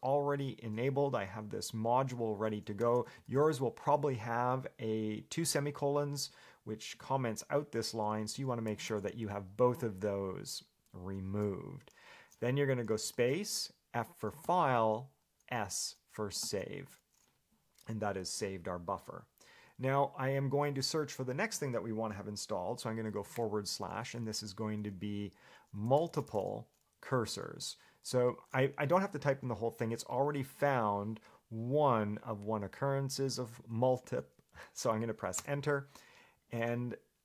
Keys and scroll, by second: 2.2 Escape, 2.8-4.1 typing, 7.1 Escape, 8.6 a, 8.9 BackSpace, 11.2 Escape, 23.6 /, 25.7-27.0 typing, 35.7 Return.